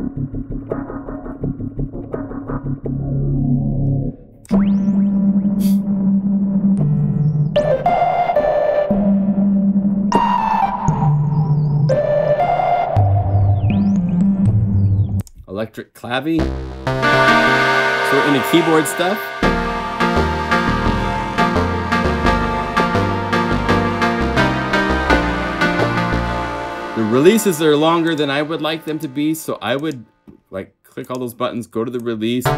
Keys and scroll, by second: 7.8 F4, 12.3 F4, 13.9 F2, 19.4 F3, 19.9 F3, 20.5 F3, 20.8 F1, 21.3 F3, 21.5 F2, 21.8 F3, 22.2 F3, 22.7 F3, 23.2 F3, 24.2-26.0 typing.